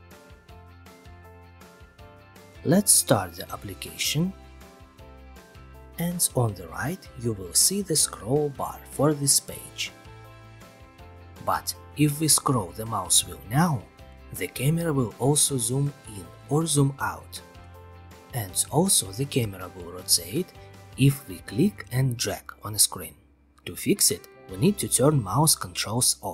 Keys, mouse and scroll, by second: 0.0-1.7 typing, 1.3-1.9 scroll, 1.9 click, 2.9-4.0 drag, 5.4-6.6 drag, 8.9 click, 10.1-11.3 scroll, 11.8-13.2 scroll, 14.7-16.1 scroll, 18.4 click, 24.3 alt+t.